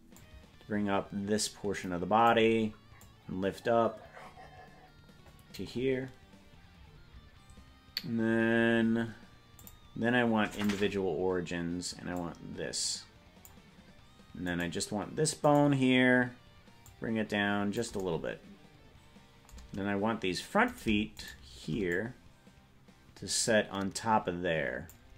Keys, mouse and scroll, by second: 0.1-2.3 drag, 3.0-5.6 drag, 9.5-10.7 drag, 12.1-13.5 drag, 14.7 right click, 16.8-17.8 drag, 16.8 right click, 20.9 right click, 21.4 shift+right click, 21.9-25.0 drag.